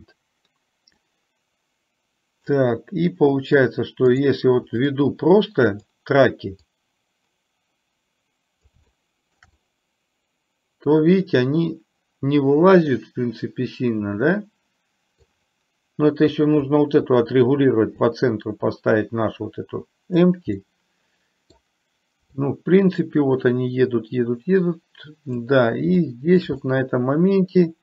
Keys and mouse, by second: 1.0-2.7 middle drag, 4.2 click, 5.0-5.8 middle drag, 6.8-8.8 drag, 8.9-9.5 shift+middle drag, 9.7-15.3 middle drag, 18.3-20.4 drag, 20.7-21.7 middle drag, 22.7-25.5 drag, 26.0-26.4 shift+middle drag, 26.7-27.8 middle drag.